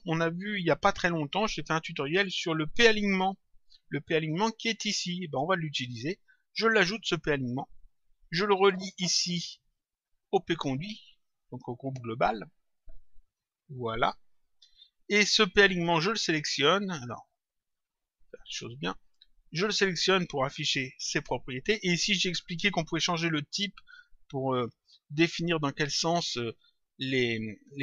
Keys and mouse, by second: 5.4 click, 6.6 click, 10.1 click, 12.9 click, 15.8 click, 17.0 click, 19.4 click, 20.5 click.